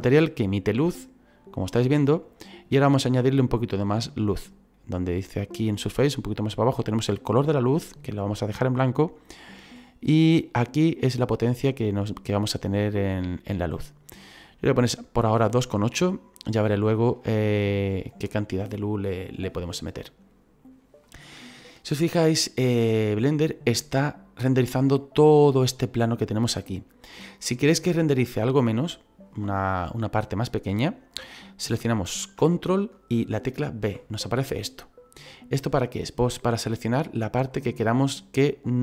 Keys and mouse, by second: 10.9 click, 17.1 shift+middle click, 33.7 ctrl+b, 37.5 click.